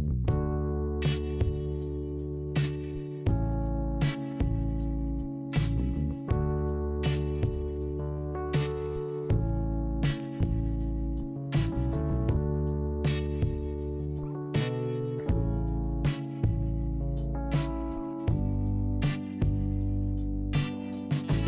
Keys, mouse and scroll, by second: 1.6 click, 1.7 click, 3.0 click, 3.1 click, 7.1 click, 7.1 click, 7.7 click, 7.8 click, 8.4 scroll down 1, 9.4 click, 10.9 click, 12.7-13.2 scroll up 1, 13.6 click, 16.2 click, 16.3 click, 17.1 click, 20.4 click, 20.5 click, 20.9-21.4 scroll up 1.